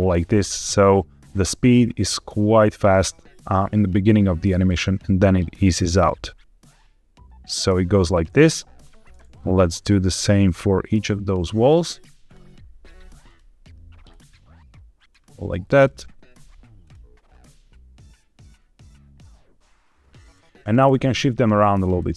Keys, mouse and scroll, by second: 2.8 click, 5.1-8.0 drag, 8.6 click, 9.4 click, 9.8 click, 12.1 click, 13.1 click, 14.0-15.0 drag, 15.6 click, 16.7 click, 17.3-20.2 drag, 21.1 click.